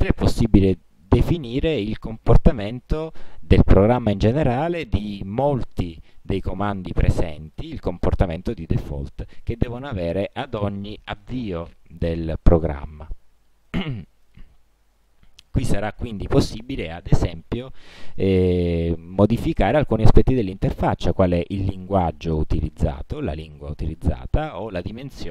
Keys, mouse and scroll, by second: 0.3 click, 1.2 click, 2.4 click, 3.1 click, 6.1 click, 6.8 click, 7.7 click, 8.1 click, 12.4-13.5 drag, 13.8 click, 14.4 click, 15.2-16.0 drag, 17.4 click, 21.3 click, 23.4 click, 25.0 click.